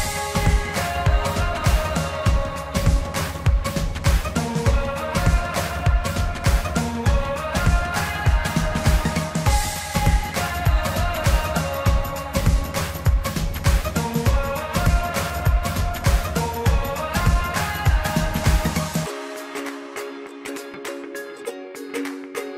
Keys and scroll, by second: 0.7 ctrl+t.